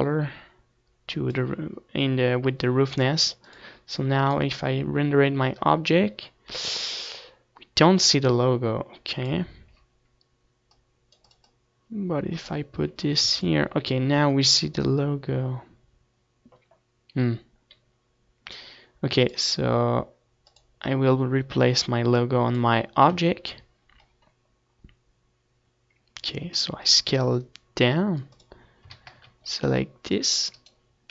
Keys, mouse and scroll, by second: 0.0-3.6 drag, 5.7-7.4 drag, 11.2-15.1 drag, 15.2 ctrl+s, 21.1-25.1 drag, 25.1 Tab, 25.8-30.2 middle drag, 28.6 s, 30.2-31.1 drag, 30.8 a.